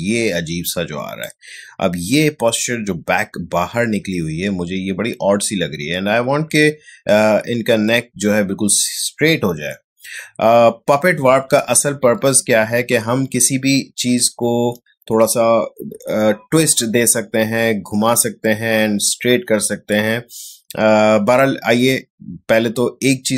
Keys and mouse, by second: 12.4 ctrl+z.